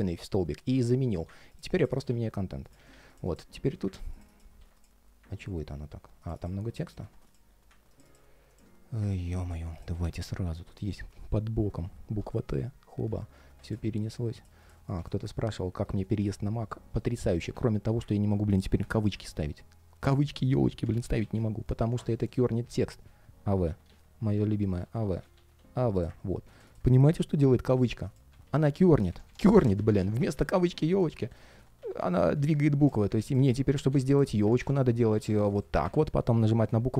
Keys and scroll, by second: 1.8 super+c, 2.5 super+a, 2.6 shift+super+v, 4.2 shift+super+v, 6.8 alt+space, 11.6 super+/, 18.9 alt+,, 19.1 alt+., 20.6 alt+,, 20.7 alt+., 28.2 alt+,, 28.6 alt+., 29.5 alt+,, 34.9 super+a, 36.6 super+/.